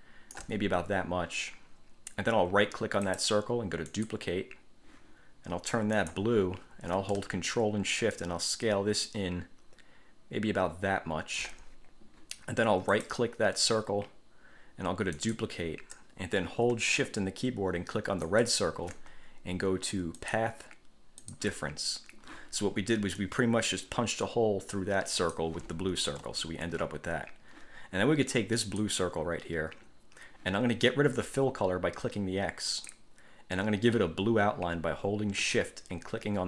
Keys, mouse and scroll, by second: 3.3 click, 4.1 click, 6.2 click, 8.3-11.8 ctrl+shift+drag, 13.1 click, 15.3 click, 18.5 shift+click, 20.4 click, 21.4 click, 23.4-25.7 drag, 26.3 ctrl+z, 28.8 click, 32.9 click.